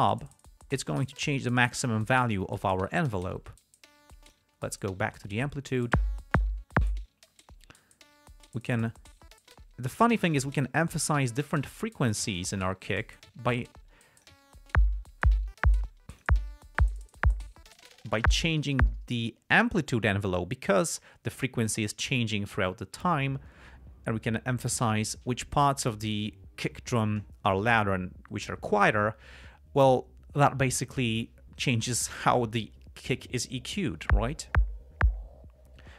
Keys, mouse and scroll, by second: 4.6 click, 7.8-10.6 drag, 11.1 click, 12.7-14.8 drag, 16.2-16.7 drag.